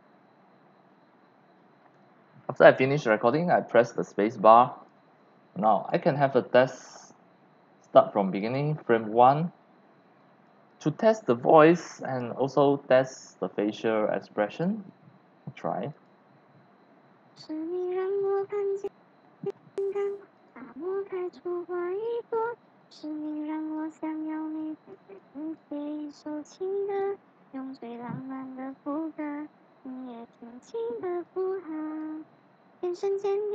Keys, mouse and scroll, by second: 1.6 click, 4.8-5.9 drag, 5.0 x, 5.3 c, 5.9 c, 8.4 click, 8.8 click, 9.0 click, 9.7 click, 10.4-11.8 drag, 10.8-12.3 typing, 11.9-13.0 drag, 13.6 x, 13.7 click, 14.1 c, 15.9 click, 18.2 click, 18.3 click, 18.5-18.9 scroll up 6, 20.3 click, 21.3 click, 21.5-21.9 drag, 23.1 x, 23.2 click, 23.7 c, 24.5 x, 24.6 click, 25.2 click, 26.5 click, 31.2 click, 31.3-31.9 c, 33.0-33.5 c, 33.1-33.5 drag.